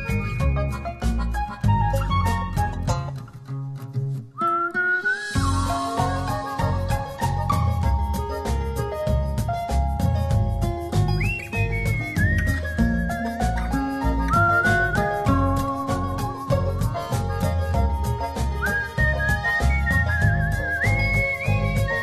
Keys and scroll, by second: 0.3 z, 1.2 s, 1.9 [, 6.1 super+0, 17.7 Return.